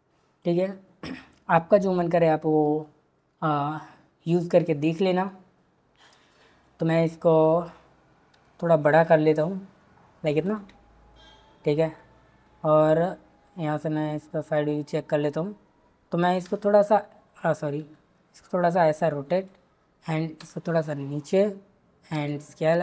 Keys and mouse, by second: 6.0 drag, 8.3 s, 13.4 click, 16.4 e, 17.8 r, 19.4 click, 20.4 g, 21.3 click, 22.1 s.